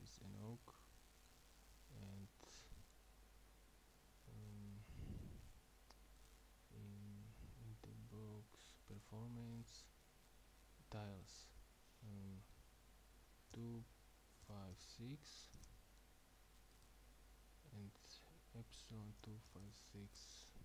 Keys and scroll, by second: 13.6-15.6 typing, 19.2-20.6 typing.